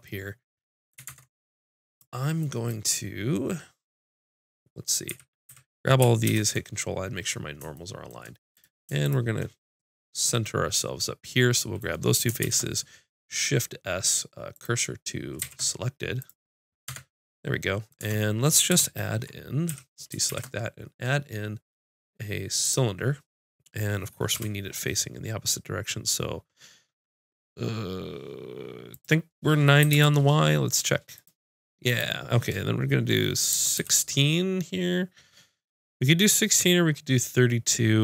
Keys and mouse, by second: 1.1 ctrl+Tab, 5.1 a, 5.5 a, 6.3 ctrl+n, 7.1 click, 8.1 click, 12.5 shift+s, 15.4 shift+s, 16.9 Tab, 18.0 Tab, 19.7 a, 20.3 shift+a, 24.4 F6.